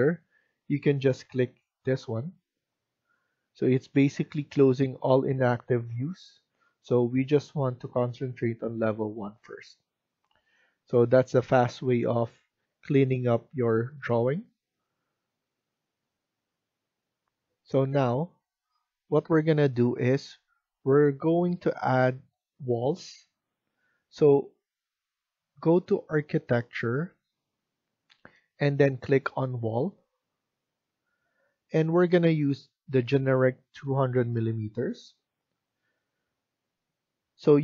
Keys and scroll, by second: 17.2 F1.